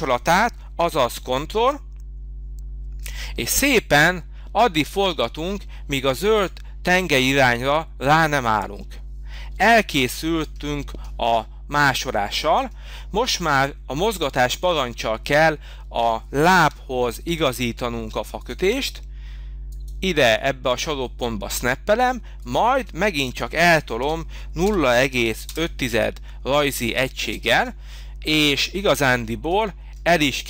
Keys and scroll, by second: 9.5 space, 16.6 m, 24.0 0, 24.6 ., 25.0 5, 25.4 Return, 27.5 space.